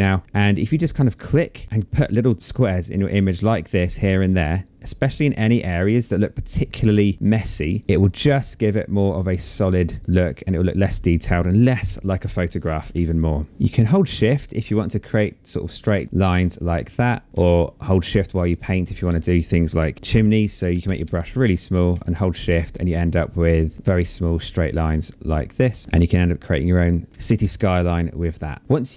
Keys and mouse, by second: 0.0 click, 6.3 space, 6.5 click, 7.8 click, 12.6 click, 13.4 space, 13.5 shift+click, 14.6 shift+click, 15.8 space, 15.9 click, 16.5 click, 17.3 shift+click, 19.3 ctrl+z, 21.6 shift+click, 23.6 click, 24.3 click, 27.7 click, 28.8 click.